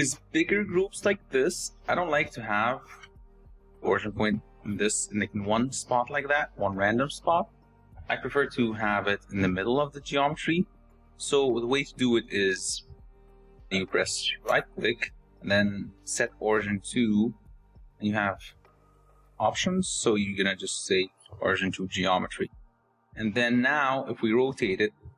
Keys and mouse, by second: 1.8 r, 4.5 r, 6.9 r, 13.6-21.5 drag, 22.8 r.